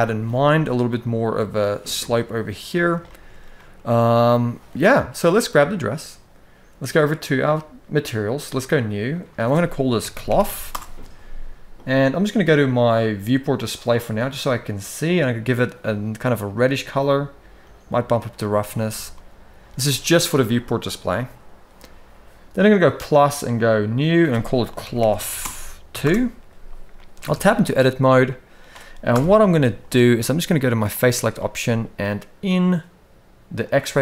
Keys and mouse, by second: 1.7-2.6 middle drag, 2.8 shift+middle drag, 3.3-4.2 middle drag, 5.1 click, 8.2 click, 9.0-10.5 drag, 11.5 click, 17.4 click, 18.5 alt+a, 18.8-19.4 middle drag, 22.6 click, 23.2 click, 23.9-25.8 drag, 26.7 middle click, 27.0 Tab, 27.6 shift+middle click, 28.8 KP_1, 30.7 click, 33.3 click, 33.8 shift+middle click.